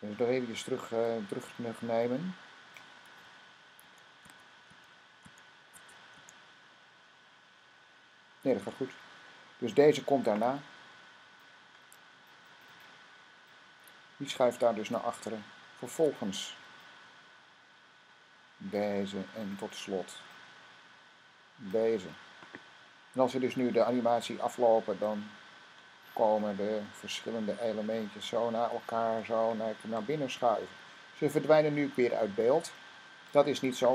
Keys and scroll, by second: 3.7-6.6 typing.